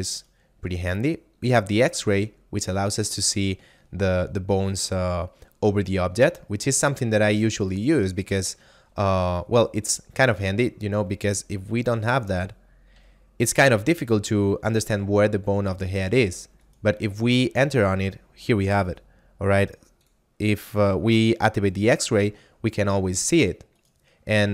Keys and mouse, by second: 0.2 right click, 1.9 click, 2.8 right click, 3.3 r, 4.6 right click, 10.4 right click, 12.4 click, 13.0 a, 16.5 right click, 20.1 click, 23.8 right click.